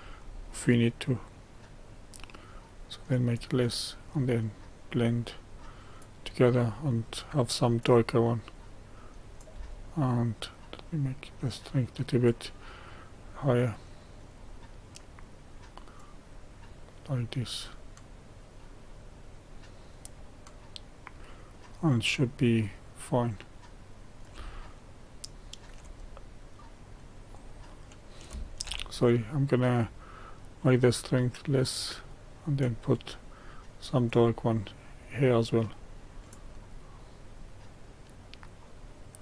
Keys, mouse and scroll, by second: 24.6-26.1 shift+middle drag, 26.1-26.9 scroll up 2, 26.9-28.7 drag, 28.7 ctrl+z, 30.2-39.2 drag.